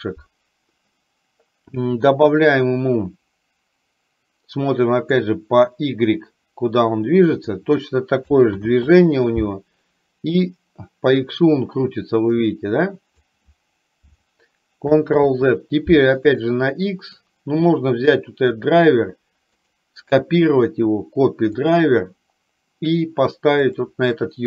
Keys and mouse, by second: 5.2-7.7 drag, 8.7 ctrl+z, 10.4-13.3 drag, 15.2 ctrl+z, 16.3-17.4 right drag, 17.9 click, 19.8-21.7 right drag, 23.7 click.